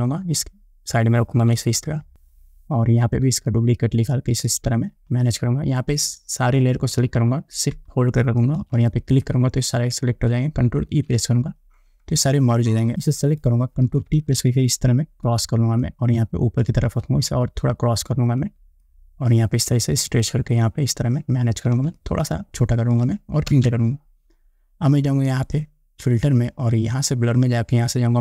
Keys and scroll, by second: 11.1 ctrl+e, 14.1 ctrl+t, 23.7 Return.